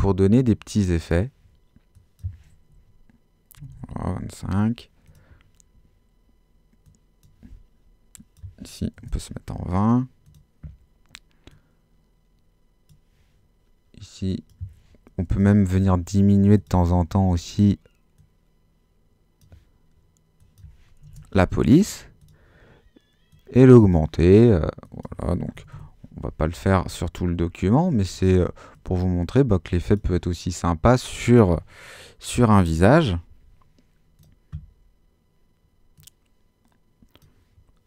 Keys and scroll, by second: 3.3-4.2 typing, 8.9 typing, 15.2 l, 15.7 0, 21.0 l, 21.5 0, 25.3-26.2 typing, 32.5-33.3 typing.